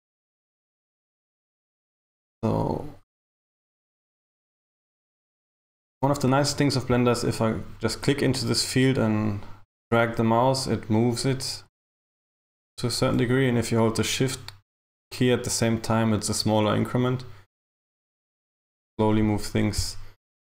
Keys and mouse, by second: 3.2 click, 8.2 click.